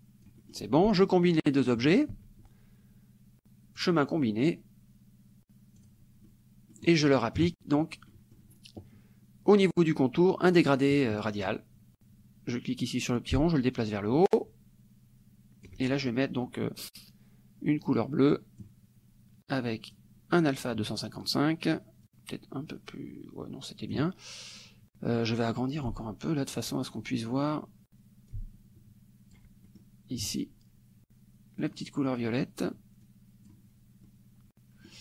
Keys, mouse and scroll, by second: 0.4 right click, 2.1 shift+click, 3.8 click, 5.9 click, 6.3 middle click, 7.5 KP_Subtract, 8.2 middle click, 9.6 click, 10.5 click, 11.3 middle click, 13.2-15.9 ctrl+drag, 18.0 click, 20.0 click, 22.2-24.2 drag, 25.9 ctrl+click, 28.3-29.6 ctrl+drag, 29.8 ctrl+middle click, 31.6 click, 33.1 click, 34.1 click.